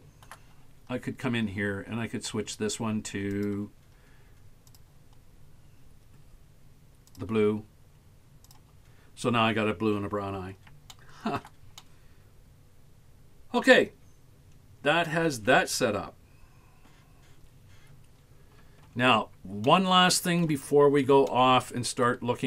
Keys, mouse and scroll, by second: 0.0 shift+middle click, 0.7-1.6 scroll up 2, 3.4 click, 9.5-9.8 scroll down 2, 11.0 shift+middle click, 11.8-13.6 middle drag, 14.0 scroll up 3, 14.5-15.2 scroll down 7, 18.3-19.7 scroll down 13, 19.7 shift+middle click, 21.3 shift+middle click.